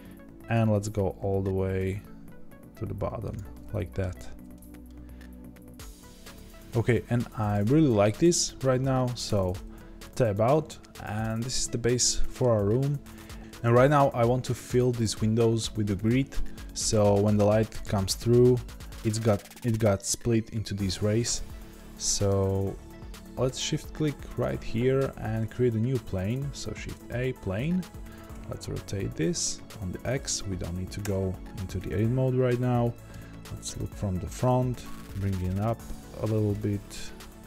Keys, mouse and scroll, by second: 0.5 click, 1.1 g, 3.5-9.2 middle drag, 4.0 scroll down 2, 4.2 z, 9.2 Tab, 9.7-24.2 middle drag, 11.2-11.6 scroll down 2, 24.2-27.0 shift+right drag, 27.0 shift+a, 28.3 r, 33.1 KP_1, 34.4 g.